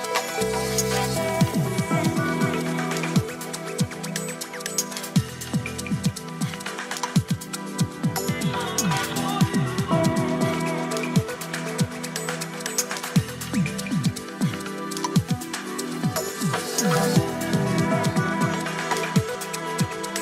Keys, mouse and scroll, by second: 0.8 click, 7.9 click, 10.4 click, 14.4 drag, 15.7-17.4 drag, 18.3 click.